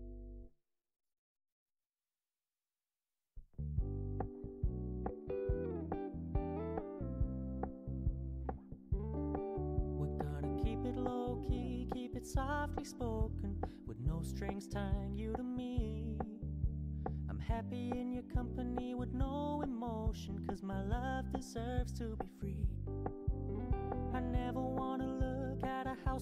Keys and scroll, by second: 22.6 ctrl+j, 25.0 ctrl+j.